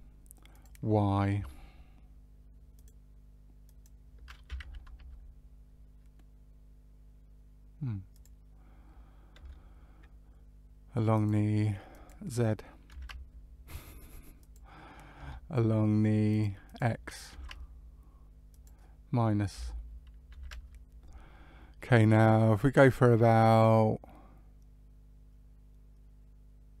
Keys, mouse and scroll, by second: 0.5 click, 6.4 click, 8.1 click, 11.8 click, 14.3 click, 16.6 click.